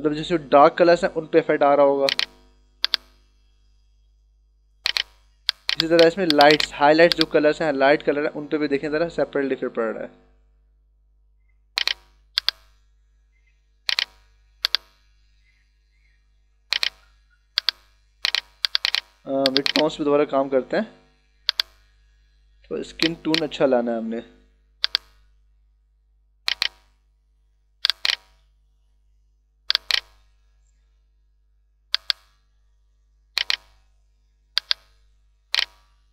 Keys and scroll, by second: 29.8 space.